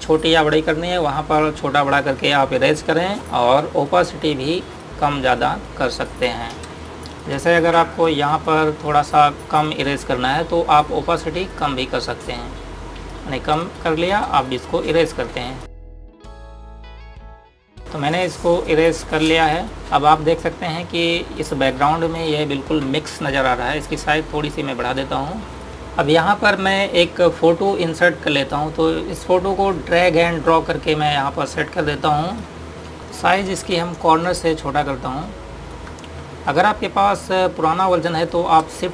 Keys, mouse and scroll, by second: 3.9 typing, 4.6 click, 7.4 space, 7.6 click, 7.9 space, 8.2 click, 14.4 space, 14.5 click, 14.8 space, 15.2 click, 16.3-18.3 typing, 16.4 click, 16.7 click, 17.2 click, 17.5 click, 18.0 click, 18.8 click, 19.7 0, 22.1 click, 29.0 click, 34.3 ctrl+-, 34.8 typing, 36.4 click.